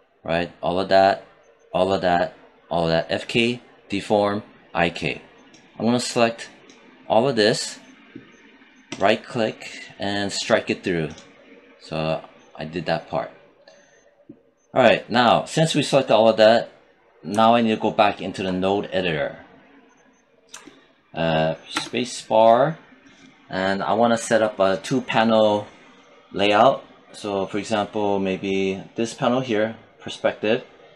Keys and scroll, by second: 21.8 space.